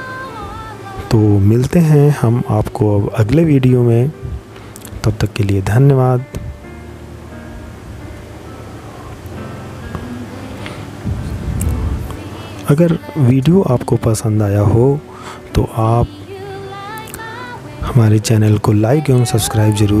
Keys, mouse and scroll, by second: 11.1 middle click.